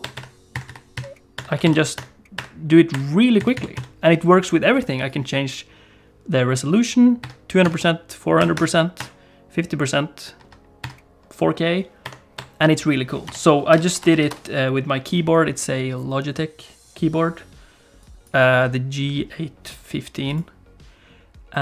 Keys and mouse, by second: 4.7 click, 7.3 click, 7.7 click, 8.4-9.7 shift+drag, 10.5 click, 10.9-12.2 drag, 12.3 click.